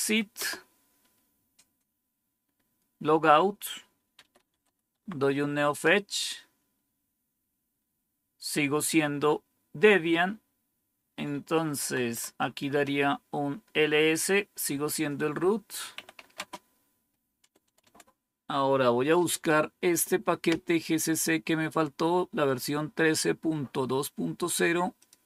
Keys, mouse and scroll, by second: 0.3 Return, 3.8-5.0 typing, 5.5 Return, 11.8 typing, 12.5 Return, 15.6-17.5 typing, 24.9 click.